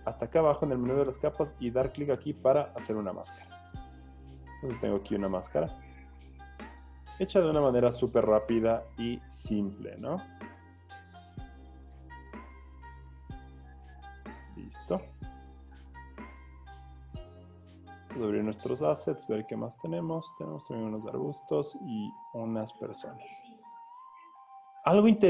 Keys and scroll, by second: 4.7 z, 5.8 z, 8.3 z.